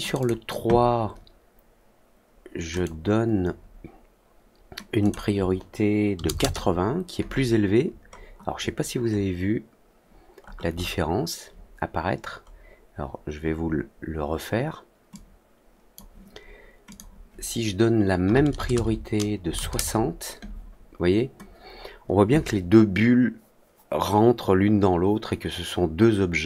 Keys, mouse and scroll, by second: 0.1 click, 2.7 click, 4.9 click, 8.0 middle click, 8.3 scroll up 2, 9.1 scroll down 2, 10.4 scroll up 2, 12.4 scroll down 2, 13.6 scroll up 2, 15.0 click, 16.8 click.